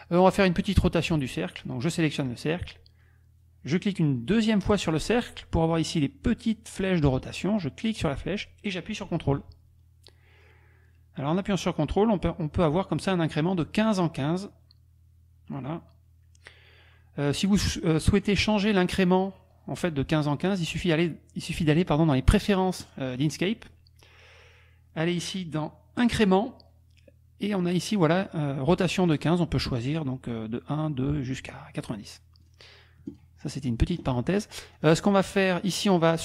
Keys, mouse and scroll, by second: 1.5 click, 1.9 click, 4.7 click, 7.6-18.4 drag, 22.8 click, 26.0 click, 29.1 click, 32.5 click, 33.2 click, 34.0 click, 34.8 click.